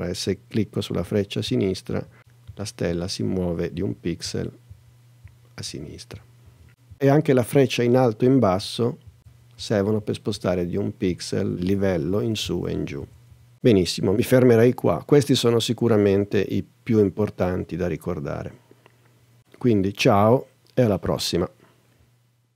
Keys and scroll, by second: 1.0 Left, 8.3 Up, 9.2 Down, 10.0 Up, 11.1 Down, 11.7 Up, 12.5 Down, 13.3 Up.